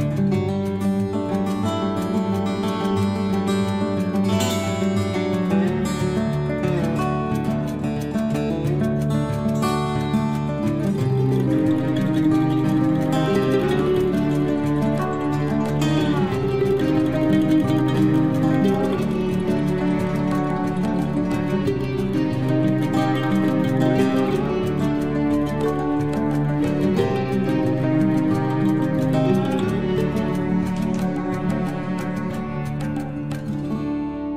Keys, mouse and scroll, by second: 0.1-0.5 scroll down 1, 0.5-1.6 scroll up 1, 1.6 click, 2.1-2.9 scroll down 1, 5.4 space, 6.5 click, 6.9 scroll down 1, 9.1 t, 12.3 scroll up 1, 12.9 click, 13.0 click, 14.3-15.4 typing, 16.6 click, 17.7 9, 17.9 Return, 20.9 scroll up 1, 21.8 click, 23.1-25.9 typing, 26.4 Return, 29.0 Escape, 29.5 space, 30.4 click, 30.4 click, 31.3 Delete, 32.1 t, 32.9 click, 32.9 click, 34.1-34.3 typing.